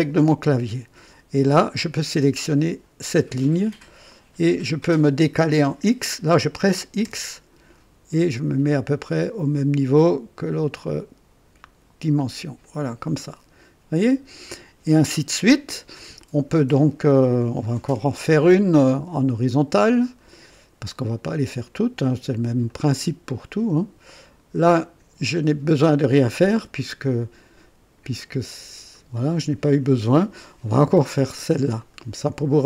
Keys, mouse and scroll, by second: 3.5 click, 7.0 x, 12.6 click, 20.0 click, 22.6 click, 24.7 click, 28.9 click, 31.8 click.